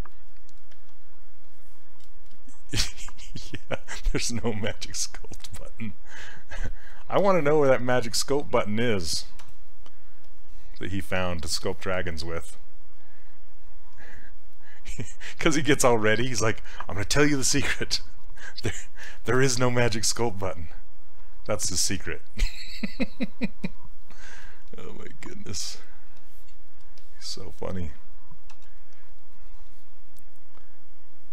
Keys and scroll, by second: 28.6 w.